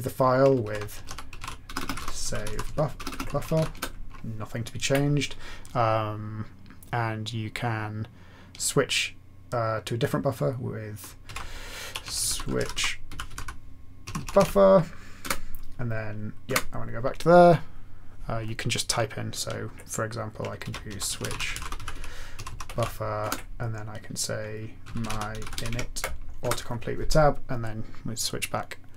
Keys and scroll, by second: 0.6 alt+x, 0.7-4.4 typing, 11.0-16.4 typing, 20.6-23.2 typing, 24.5-26.0 typing, 26.4 Return.